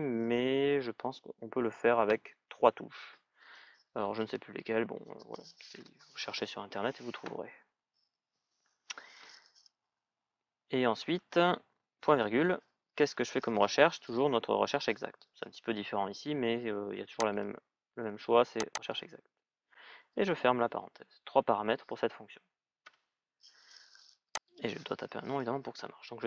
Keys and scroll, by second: 22.6 Return.